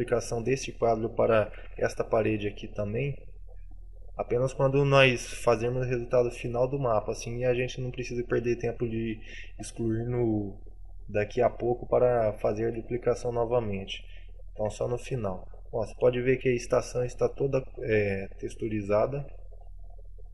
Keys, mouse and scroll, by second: 1.8 shift+d, 2.6 click, 3.5 click, 13.1 Delete, 15.1 middle click, 15.6-16.0 scroll down 5, 16.0 middle click, 17.8-18.4 scroll up 4, 18.4 middle click, 19.5 shift+middle click, 19.8 shift+scroll up 1, 20.1 shift+middle click.